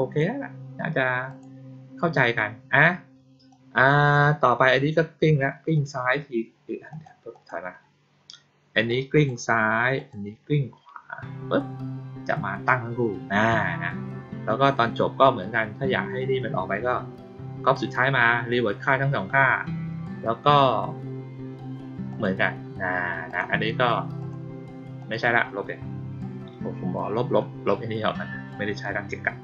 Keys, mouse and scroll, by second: 1.2 click, 3.4-5.7 drag, 6.8 click, 7.2 click, 8.8-9.2 drag, 9.9 click, 22.0 click, 23.2 click, 24.1 click, 24.9 click.